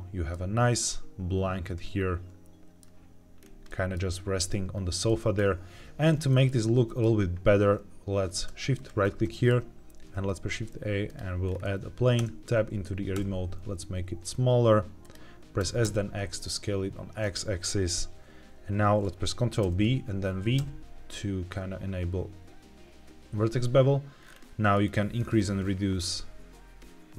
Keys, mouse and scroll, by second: 0.8-2.7 middle drag, 3.3 scroll up 1, 3.6 middle click, 4.7-5.0 scroll down 1, 5.0 middle click, 6.2 shift+middle drag, 6.8 middle click, 8.7 shift+right click, 9.2 shift+middle click, 10.1 shift+a, 11.4-12.0 scroll up 2, 12.1 Tab, 13.1 s, 14.9 click, 15.5 s, 15.7 x, 17.1-19.5 drag, 19.5 ctrl+b, 20.5 v, 23.2-24.1 scroll down 2, 24.6 scroll down 2, 25.1-26.7 scroll down 2.